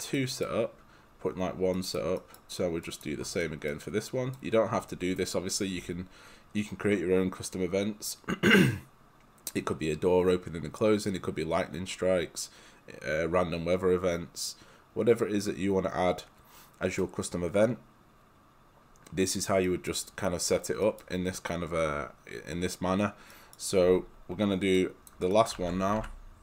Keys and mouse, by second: 0.2 right click, 2.9 click, 3.5 right click, 19.7 right click, 24.8 click, 25.3 right click, 25.6 ctrl+c, 26.0 ctrl+v.